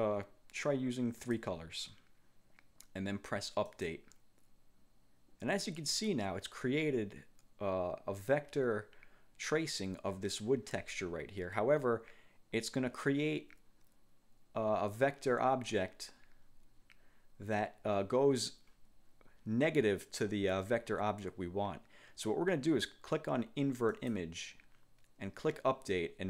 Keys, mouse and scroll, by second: 1.3 click, 3.8 click, 24.1 click.